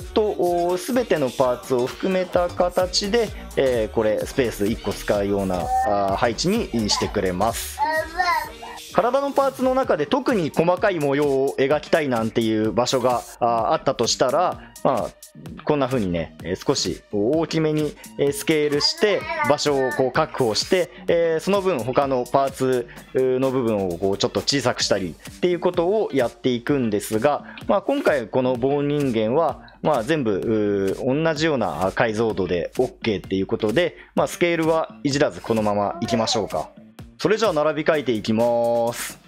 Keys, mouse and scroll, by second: 8.7 ctrl+z, 16.1 s, 27.6 ctrl+z.